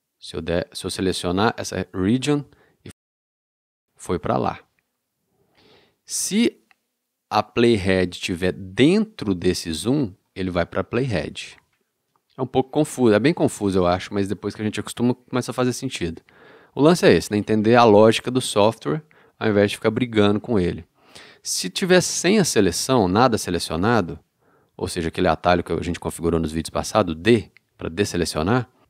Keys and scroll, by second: 27.3 d.